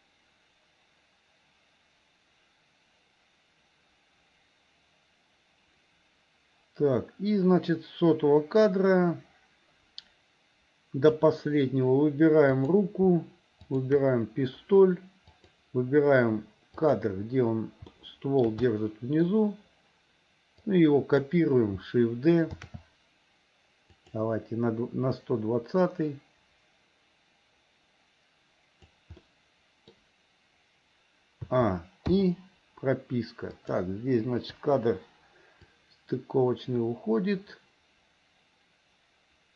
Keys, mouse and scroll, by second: 12.6 click, 13.6 shift+click, 15.4 click, 16.9 click, 17.9 shift+middle click, 18.7 middle click, 20.7 click, 22.6 shift+d, 25.3-29.0 drag, 29.2 middle click, 31.5 a, 32.2 i, 33.5 click, 34.6 Delete, 35.8-39.5 drag.